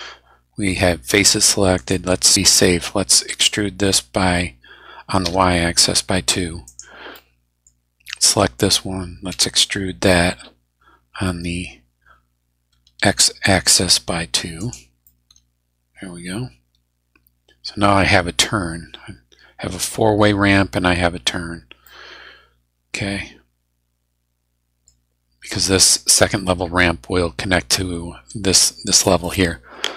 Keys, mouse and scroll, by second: 1.7 right click, 3.2 e, 5.2 y, 6.7 click, 7.1 middle click, 8.1 click, 9.3 e, 12.7 x, 14.6 click, 15.0-18.1 middle drag, 21.8-25.0 middle drag.